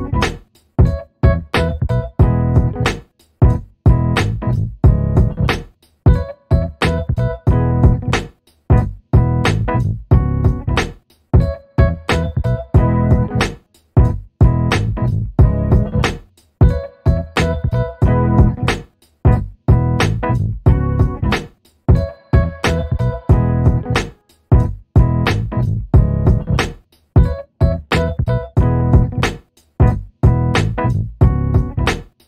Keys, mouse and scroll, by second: 0.8 right click, 1.3 click, 2.7-3.0 scroll down 1, 3.0 alt+middle click, 3.9 click, 5.7 Escape, 6.5 alt+middle click, 6.8-7.8 alt+scroll up 1, 12.2 click, 15.2 click, 16.4 Escape, 17.9 click, 19.1 Escape, 20.7 alt+middle click, 23.2 click, 29.2 Escape, 30.2 alt+middle click.